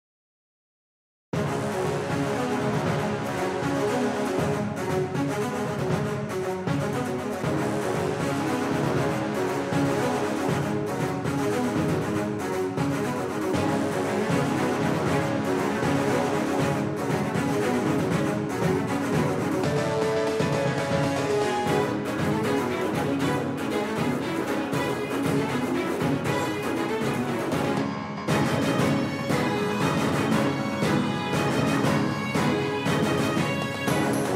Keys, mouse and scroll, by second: 8.1 Tab, 10.4-14.2 right drag, 11.2-14.5 drag, 17.4-19.9 right drag, 20.1-22.5 right drag, 21.4 KP_1, 24.0 KP_3, 25.3 KP_1, 27.2-28.5 drag, 28.5 middle click, 29.0 click, 29.1 middle click, 29.2 click, 29.3-30.9 middle drag, 30.9-33.4 drag, 33.8-34.3 middle drag.